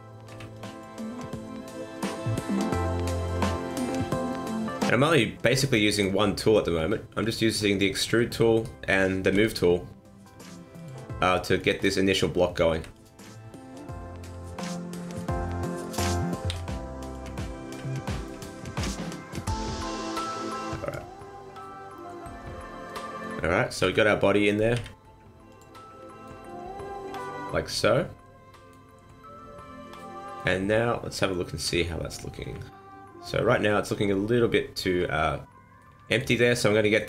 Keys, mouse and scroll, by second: 0.2 b, 1.2 click, 3.0 click, 4.6 right click, 5.5 b, 6.6 click, 8.6 right click, 9.4 g, 11.6 right click, 12.8 b, 14.2 g, 15.7 right click, 16.5 v, 17.6 ctrl+z, 18.3 b, 19.3 click, 20.2 click, 21.2 middle click, 22.2 scroll down 2, 22.4 middle click, 23.0 shift+middle click, 23.8 KP_1, 24.8 z, 26.1 shift+middle click, 26.5 middle click, 29.0 scroll down 1, 29.1 middle click, 31.6 KP_1, 32.4 KP_3, 34.0-34.7 scroll up 1, 35.8 middle click, 36.4 middle click.